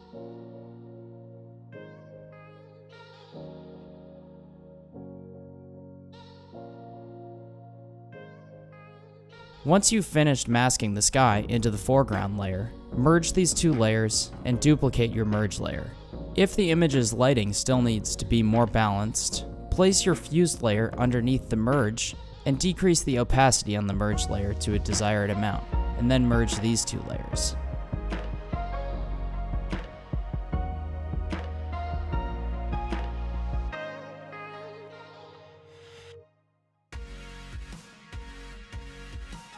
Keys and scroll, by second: 1.2 i, 2.2 super+=, 2.6 super+space, 3.2 |, 6.4 b, 6.7 x, 8.4 super+d, 8.8 super+-, 9.3 super+space, 13.0 super+e, 15.5-17.0 typing, 19.0 super+j, 38.3 Return.